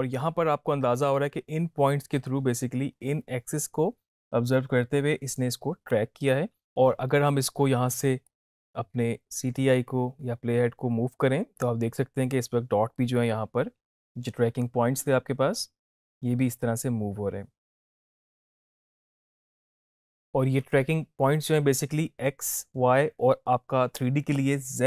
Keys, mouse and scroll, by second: 6.6 drag.